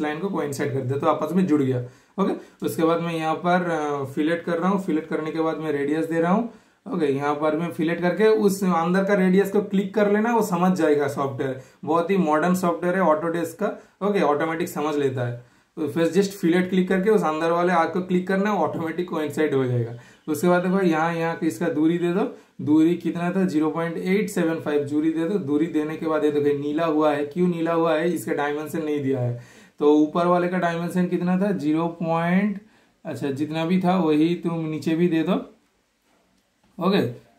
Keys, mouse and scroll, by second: 0.7 super+right click, 1.3 super+click, 2.6 super+click, 6.4 super+Return, 6.8 super+middle click, 7.4 super+click, 9.4 super+Return, 10.2 super+click, 10.6 super+middle click, 11.1 super+click, 15.6 super+click, 16.0 super+right click, 17.2 super+click, 24.2 super+click, 24.9 super+Return, 24.9 typing, 25.3 super+right click, 25.8 super+click, 27.4 super+click, 27.4 typing, 29.3 super+click, 29.3 super+click, 32.0-32.4 typing, 32.4 super+scroll up 1, 32.6 super+scroll down 1, 33.2 super+scroll up 1, 33.8 super+right click, 34.1 super+click, 36.0 click.